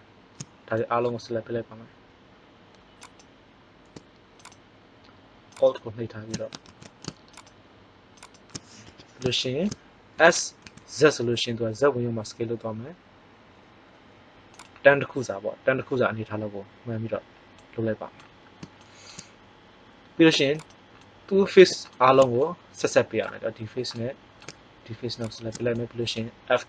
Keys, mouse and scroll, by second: 3.0-4.4 right drag, 6.6 ctrl+z, 8.8 KP_1, 10.1 s, 15.1-16.5 drag, 17.5-19.2 middle drag, 21.1-22.3 middle drag, 25.3 right click.